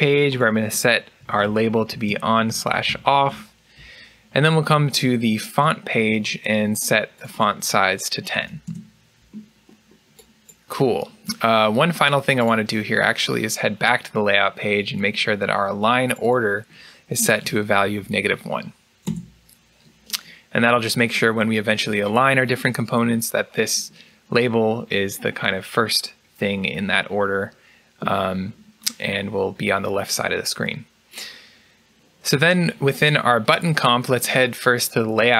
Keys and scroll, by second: 0.8-3.3 typing, 7.9-8.7 typing, 18.7-19.4 typing.